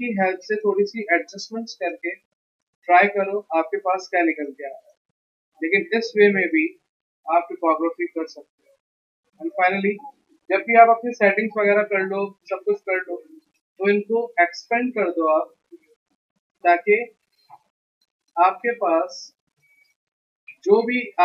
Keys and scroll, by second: 5.4 v, 16.5 v, 19.2 ctrl+alt+2, 20.4 ctrl+x.